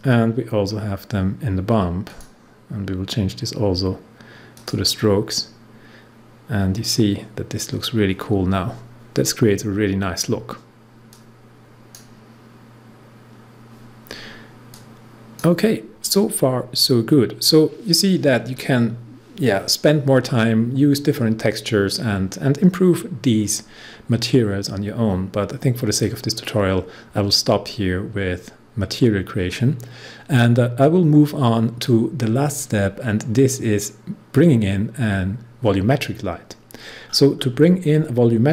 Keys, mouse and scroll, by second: 0.6 scroll down 1, 2.0 click, 4.5 click, 9.7 scroll down 1, 11.0-14.4 drag, 14.7-16.4 drag, 16.4 scroll up 1, 29.4-31.2 scroll down 1, 31.2 scroll down 1.